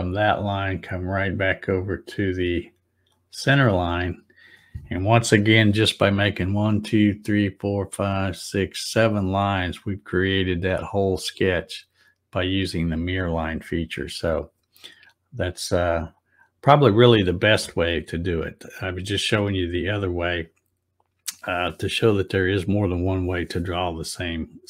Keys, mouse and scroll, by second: 0.2-3.0 drag.